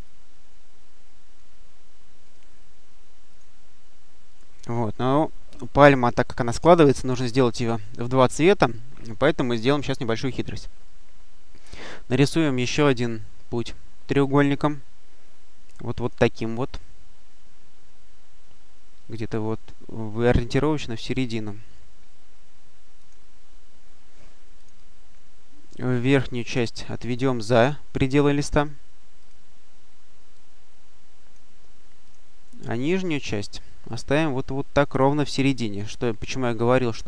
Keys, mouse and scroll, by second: 0.2-1.6 drag, 2.1 click, 3.2 click, 4.2 click, 11.5 click, 14.1 click, 15.9 click, 21.0 click, 22.9 click, 24.4 click, 26.2-28.6 drag, 29.1 click, 30.2-31.7 drag, 31.9 click, 32.7-35.3 drag, 36.4-37.0 drag.